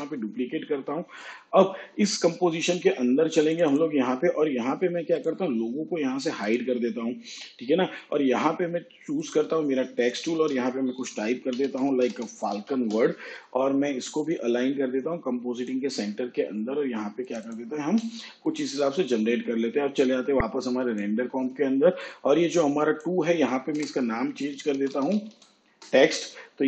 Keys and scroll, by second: 0.0 ctrl+d, 11.0-13.3 typing, 24.0 Return, 24.7-26.0 typing.